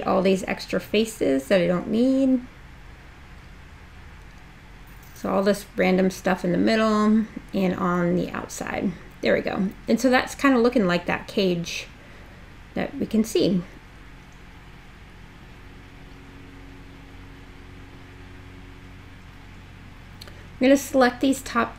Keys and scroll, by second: 0.0 BackSpace, 2.7 BackSpace.